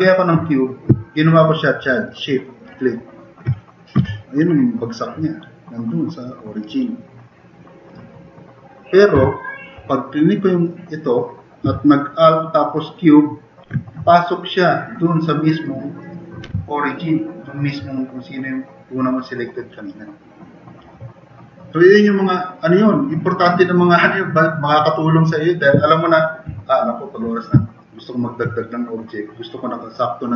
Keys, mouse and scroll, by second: 4.0 t, 4.1 drag, 4.6 click, 5.6 click, 9.2 Delete, 16.4 t, 17.3 click.